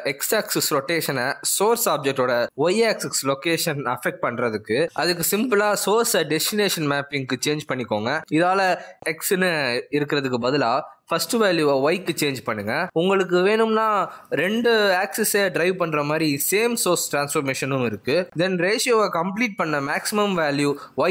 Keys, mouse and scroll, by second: 9.1 click, 20.5 click.